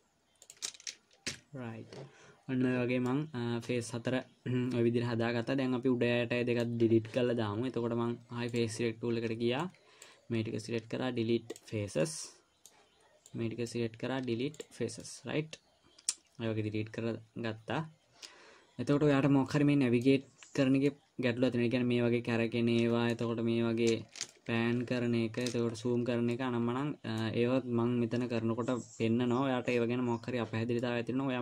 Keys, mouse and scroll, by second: 0.6 click, 1.7 f, 3.5 middle click, 8.9 click, 10.0 click, 11.0 Delete, 12.4 middle click, 13.7 click, 14.5 Delete, 15.4 middle click, 21.2 middle click, 24.7 shift+middle click, 26.1 scroll up 3, 26.2-26.8 scroll down 3, 26.7 middle click, 31.2 middle click.